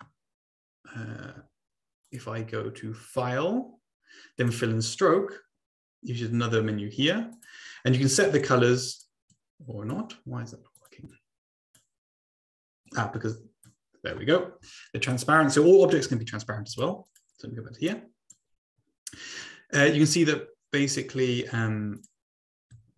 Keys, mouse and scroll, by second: 2.0 click, 4.4 click, 7.3 click, 8.5 click, 9.3-10.0 drag, 10.8 click, 11.2 click, 13.0 click, 15.1 click, 16.2 Delete, 16.7 click, 17.2 click, 18.0 click, 21.9 shift+click.